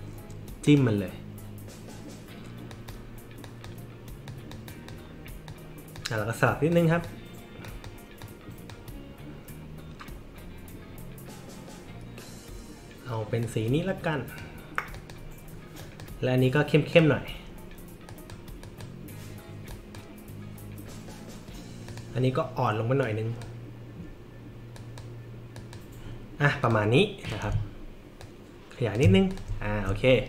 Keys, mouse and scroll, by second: 0.6 click, 2.7 click, 3.4 click, 4.3 click, 4.7 click, 5.5-5.9 drag, 6.7 click, 7.6 drag, 8.2 click, 13.4 click, 14.9 click, 15.8 drag, 16.9 click, 18.1 click, 18.6 click, 19.7 click, 21.9 click, 23.0 click, 24.8 click, 25.6 click, 26.6 click, 27.2 click, 28.2 alt+shift+click, 29.3 click, 29.6 alt+scroll up 2.